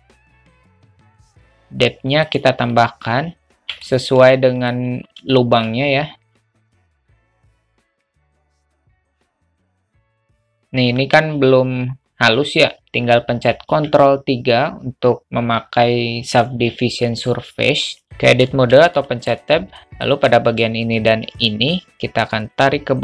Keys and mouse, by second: 2.3 click, 2.7 click, 3.5-3.8 alt+middle drag, 5.3 shift+middle click, 5.5 alt+shift+click, 5.9 s, 6.7 click, 7.5 alt+shift+middle click, 7.6 s, 8.1 shift+middle click, 8.3 s, 8.6 middle drag, 8.9 alt+shift+middle click, 9.4 click, 9.5 click, 9.9 click, 10.2 alt+middle drag, 13.7 ctrl+3, 18.3 Tab, 19.0 shift+middle click, 21.1 shift+click, 22.3-23.0 drag.